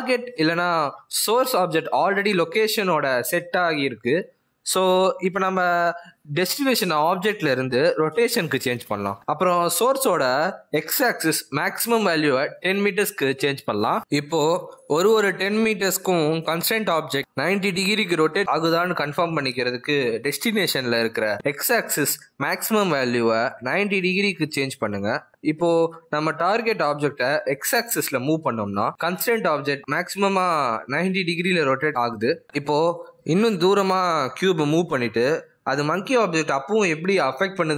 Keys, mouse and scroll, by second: 0.2 click, 8.6 click, 9.2 click, 11.4 click, 14.0 click, 19.7 click, 28.3 click, 29.5 g.